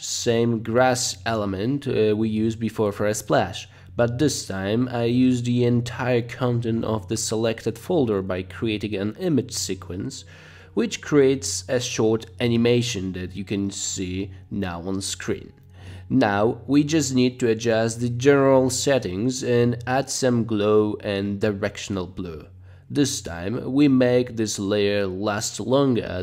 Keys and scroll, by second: 10.5 space, 11.1 space, 14.2-15.8 typing, 22.5 Page_Down, 23.0 Page_Down, 23.7 Page_Down, 24.0 Page_Down, 24.5 Page_Up, 24.8 Page_Down, 25.1 Page_Down, 25.4 Page_Down, 25.9 Page_Down.